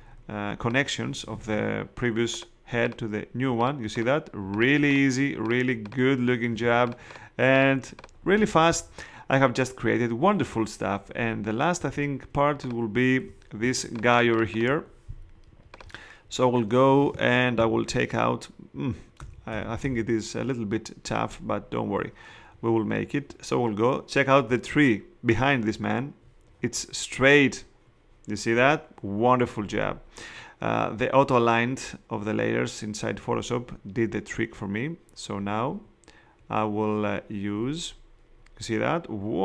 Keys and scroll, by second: 6.5 space, 13.6 shift+space, 14.3 space, 19.2 ].